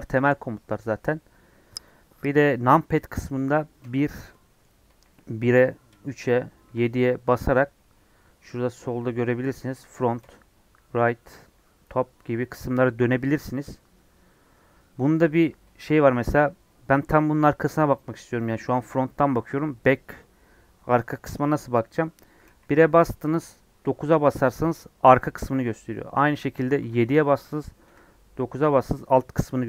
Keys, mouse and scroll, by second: 0.0-4.8 shift+middle drag, 4.8 KP_1, 22.4 KP_1, 23.7 KP_9, 26.7 KP_7, 27.8 KP_9.